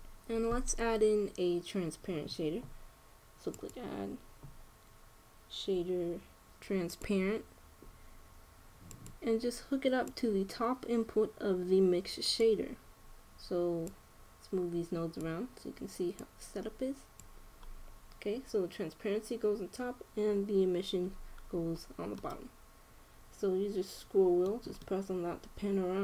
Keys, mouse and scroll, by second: 4.3-6.1 drag, 10.8-12.5 drag, 14.6-16.3 drag, 16.9-18.7 drag, 18.7 middle click, 22.9-24.7 middle drag, 25.5-26.0 middle drag.